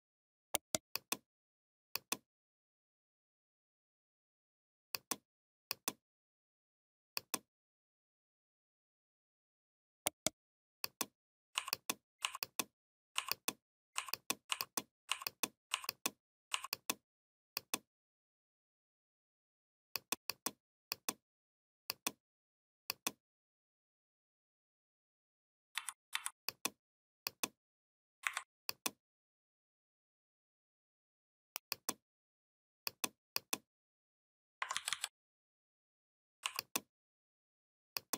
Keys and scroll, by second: 25.6 v, 28.1 Delete, 34.5 ctrl+].